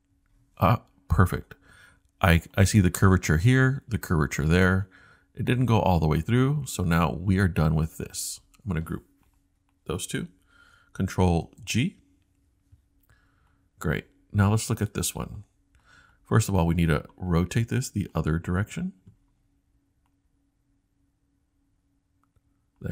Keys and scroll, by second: 0.1-1.9 scroll down 1, 11.4 super+g.